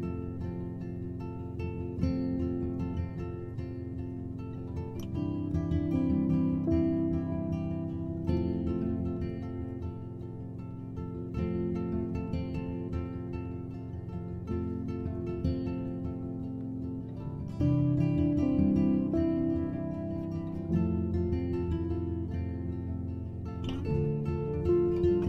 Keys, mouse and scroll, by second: 0.0-0.6 scroll up 1, 0.6-10.0 drag, 10.1-10.8 drag, 10.8-14.8 right drag, 14.8-16.0 drag, 17.2 click, 18.2-18.9 scroll down 4, 19.7 click, 21.1 click, 22.1-25.2 drag.